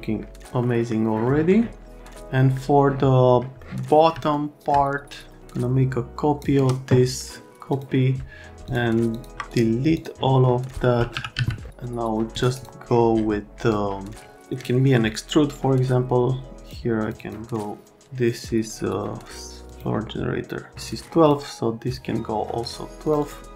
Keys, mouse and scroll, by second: 0.6 right click, 1.3 right click, 3.6 right click, 4.3 alt+middle click, 5.4 click, 7.7 click, 8.6 click, 9.1 click, 10.0 click, 10.9-11.9 typing, 11.7 click, 15.5 click, 17.0 click, 17.2 click, 19.7 click, 20.8 click, 21.2 click, 21.8 click, 23.1 click, 23.2 click.